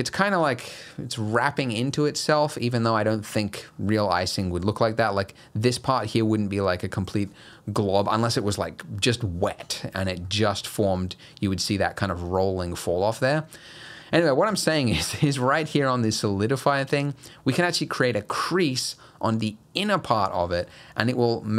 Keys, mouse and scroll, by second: 3.7-4.3 scroll down 3, 4.1 scroll up 1, 4.3 middle click, 4.7-5.8 scroll up 2, 5.8 scroll up 1, 10.3 middle click, 12.8-13.1 scroll down 1, 13.1 middle click, 14.0-14.8 scroll down 1, 19.0 click, 20.5 scroll down 2, 20.7 middle click.